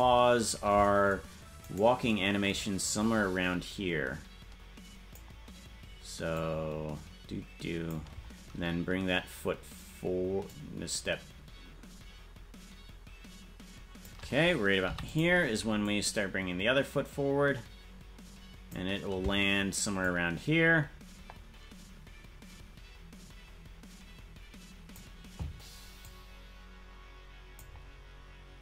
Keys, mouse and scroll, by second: 1.7 right click, 2.8-5.2 drag, 6.3-7.9 drag, 10.4-14.1 drag, 14.8 i, 15.8-18.7 drag, 20.0-25.0 drag, 26.0-27.6 drag.